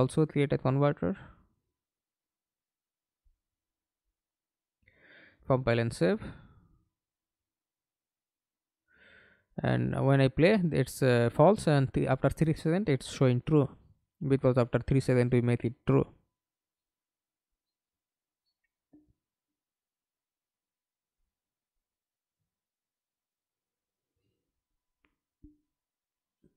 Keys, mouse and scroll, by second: 1.8 right click, 3.4 right click, 6.5 middle click, 7.3 F11, 7.9 alt+p, 13.7 Escape, 14.3 middle click, 15.1 F11, 19.4-20.3 scroll down 1, 20.3-20.6 scroll down 2, 20.7 right click, 22.0-22.4 scroll down 1, 22.9 right click, 26.0 right click.